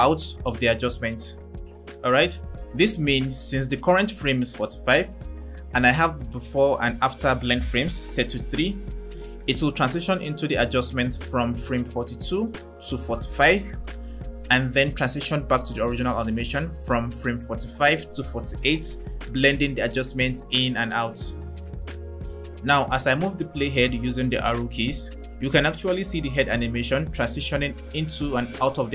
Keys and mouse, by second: 23.6 Right, 23.9 Right, 24.1 Right, 24.3 Right, 24.7 Right, 25.0 Left, 25.2 Left, 25.4 Left, 25.6 Left, 25.8 Left, 26.0 Left, 26.2 Left, 26.6 Right, 26.8 Right, 27.0 Right, 27.2 Right, 27.4 Right, 27.7 Left, 27.9 Left, 28.1 Left, 28.4 Left, 28.6 Left.